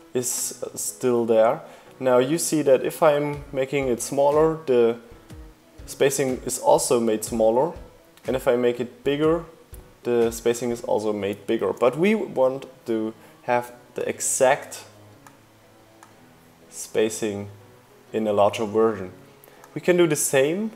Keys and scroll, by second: 9.7 super+z.